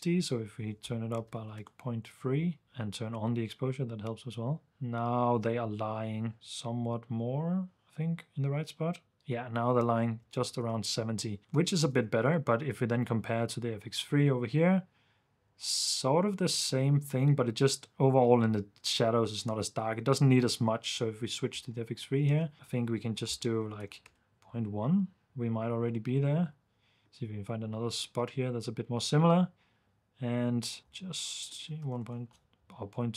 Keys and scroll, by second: 1.1-1.8 typing, 2.6 super+d, 9.8 super+d, 10.4 super+s, 10.7 super+f, 11.4 super+d, 11.5 ⟲, 12.1 super+s, 22.3 super+d, 23.5-24.4 typing, 31.6-32.4 typing.